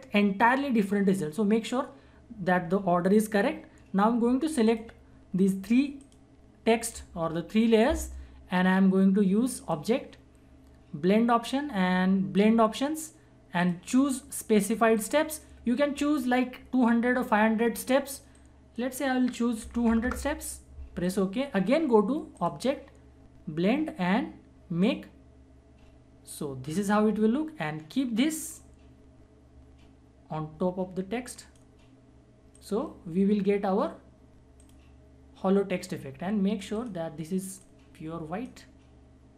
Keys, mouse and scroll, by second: 4.3 shift+Num_Lock, 4.6 shift+click, 9.6 click, 12.4 click, 18.4-21.0 drag, 24.8-39.3 drag.